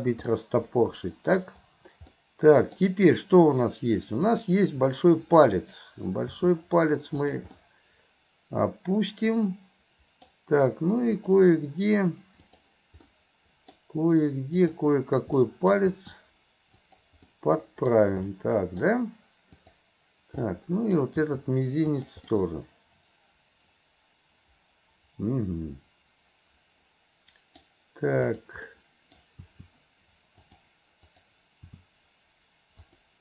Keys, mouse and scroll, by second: 0.3 scroll up 1, 0.4-1.4 middle drag, 2.2 middle click, 4.2 click, 4.9-5.6 middle drag, 6.3 r, 7.6-10.3 middle drag, 11.2 click, 12.4 click, 13.1-13.8 middle drag, 14.6 click, 15.4-15.8 middle drag, 15.9 r, 17.3-17.9 middle drag, 17.9-18.3 scroll down 1, 18.3-18.9 middle drag, 18.9-19.6 scroll down 1, 19.6 click, 20.5-21.0 middle drag, 21.2 r, 22.3-27.7 middle drag, 28.2 click, 28.7-29.2 middle drag, 29.4 r, 31.0 click, 31.7 r.